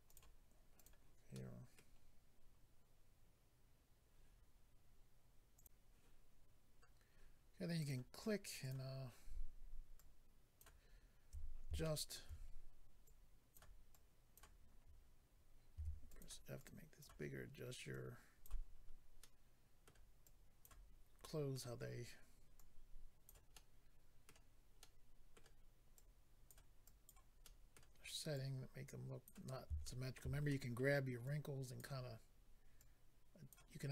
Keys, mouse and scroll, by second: 0.0 click, 0.1 click, 0.7 click, 0.8 click, 1.3 middle click, 5.5 click, 5.7 click, 6.6-7.8 scroll up 1, 7.8 click, 7.8 scroll up 1, 7.9 click, 8.6 click, 8.7 click, 8.9 scroll down 3, 9.9 click, 10.8-11.8 scroll up 3, 12.3-13.0 scroll up 1, 13.0 click, 13.0-13.4 scroll up 1, 13.9 click, 15.7 f, 16.0 click, 16.2 click, 16.5 click, 17.5-17.9 scroll down 1, 17.9 click, 18.8-19.6 scroll down 2, 19.2 middle click, 20.2 click, 21.2 middle click, 21.8-22.1 scroll up 1, 22.5 click, 23.5 middle click, 24.8 middle click, 25.9 click, 26.8 click, 27.4 middle click, 28.3 click, 29.8 shift+middle click, 30.4 middle click, 31.2 click, 32.0-32.8 scroll down 2, 32.8 click, 33.7-33.9 scroll up 2.